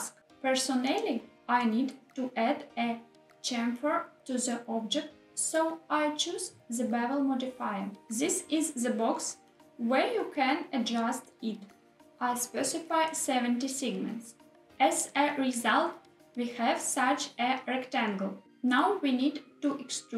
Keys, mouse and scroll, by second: 11.6 click, 12.7-15.5 drag.